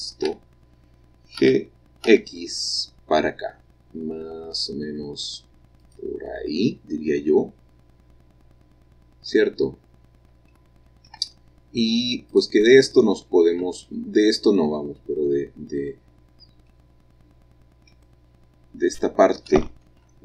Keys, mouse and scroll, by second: 1.4 g, 2.1 x, 5.8 click, 12.4 click, 12.4 middle click, 13.6 Tab, 16.7 middle click.